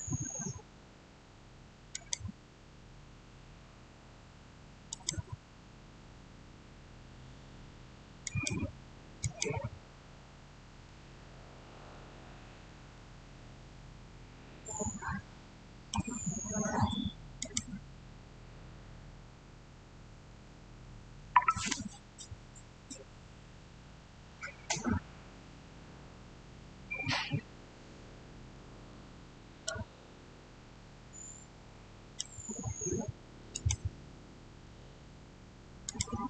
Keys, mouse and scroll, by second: 1.8 click, 4.7 click, 8.1 click, 8.1 click, 12.8-16.6 shift+middle drag, 17.2 click, 28.4 click, 28.7 shift+middle click, 28.9 shift+scroll down 1, 30.6-33.4 shift+middle drag, 33.4 click, 35.7 click.